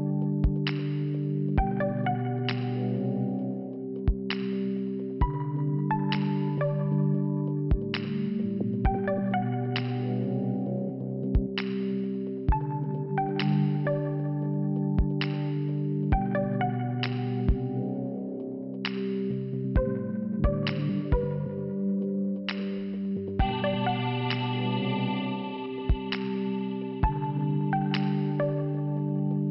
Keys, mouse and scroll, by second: 0.5 click, 1.5 middle click, 7.6 click, 7.7 click, 11.5 click, 17.3 click, 20.7 shift+Return, 21.7 click, 22.7 middle click, 22.9 click, 22.9 middle click, 24.2 click, 27.1 click, 28.7 click, 28.8 click.